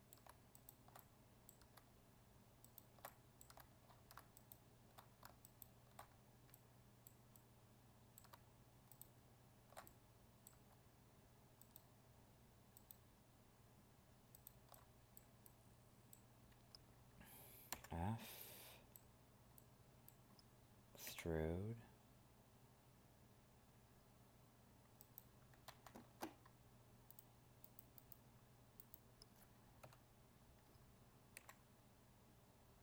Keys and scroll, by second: 25.7 ctrl+z.